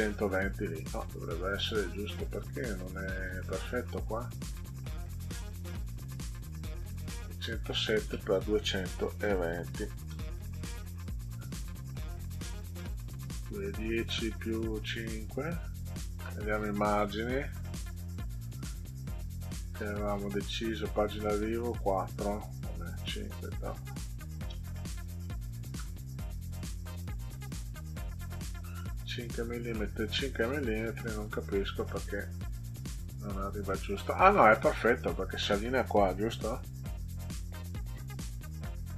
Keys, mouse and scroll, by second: 0.2 click, 5.7 click, 7.2 click, 9.0 2, 10.1 Return, 16.9 click, 18.0 click, 20.3 click, 23.1 click, 23.4 click, 23.8 click, 25.2 5, 25.7 Return, 27.2 click, 28.1 click, 29.7 middle click, 31.1 click, 36.3 ctrl+z.